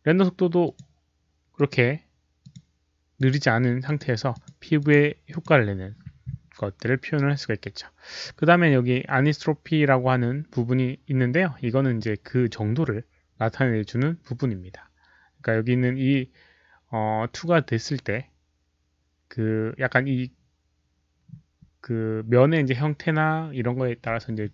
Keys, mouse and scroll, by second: 0.6 click, 1.5 click, 2.4 click, 3.1 click, 3.8 click, 4.3 click, 4.7 click, 5.2 click, 11.4 click.